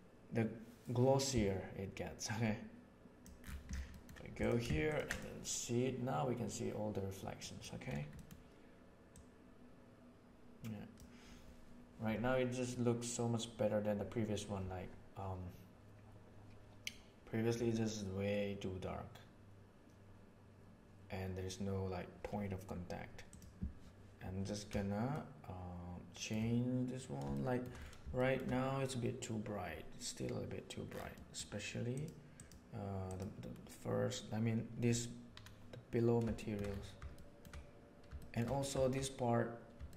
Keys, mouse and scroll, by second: 3.2-4.0 middle drag, 4.3 click, 5.1 click, 7.4 middle click, 8.1 middle click, 9.0 click, 23.2 click, 25.1-26.2 shift+middle drag, 27.3 shift+middle drag, 28.1 shift+middle drag, 31.1 middle click, 31.9 click, 32.3-34.0 drag, 36.3 shift+middle click, 37.1-37.4 shift+middle drag, 38.1 shift+middle drag, 39.8 shift+middle drag.